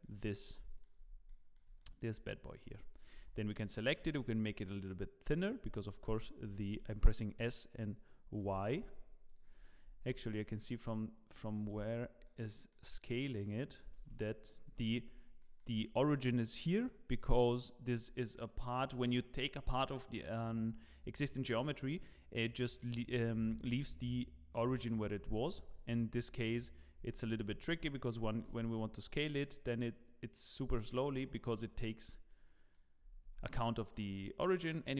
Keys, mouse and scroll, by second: 0.6 shift+middle click, 1.2 middle click, 1.2 scroll up 1, 1.8 shift+middle click, 2.6 Tab, 3.1 a, 3.9 s, 6.4 s, 9.2 s, 9.5-10.2 scroll down 10, 10.7 middle click, 10.7 scroll down 4, 11.6 Tab, 11.9 scroll down 2, 12.2 middle click, 13.9 s, 15.0 scroll down 3, 15.4 shift+middle click, 23.7-24.5 scroll up 3, 24.5 middle click, 25.0-25.3 scroll up 2, 25.3 shift+middle click, 25.8 scroll up 4, 26.5 shift+middle click, 27.0 Tab, 27.3 a, 27.7 s, 32.0 scroll down 2, 32.3 middle click, 32.9-33.4 scroll up 4, 33.2 Tab, 33.4 middle click, 33.9 shift+middle click, 34.6 right click.